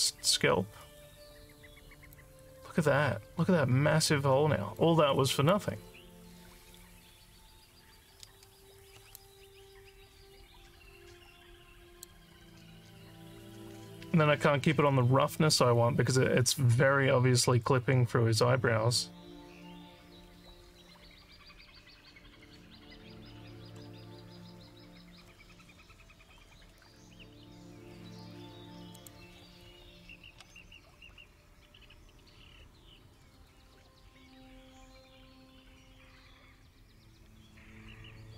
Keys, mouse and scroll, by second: 4.1 alt+click, 5.1 alt+click, 9.2-12.1 alt+drag, 13.6 alt+click, 23.6 scroll up 3, 28.9 click, 33.4 click.